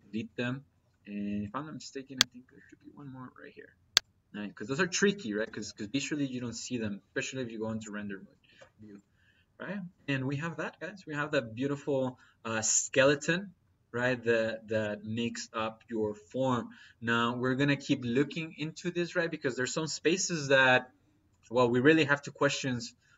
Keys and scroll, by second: 5.2 Delete.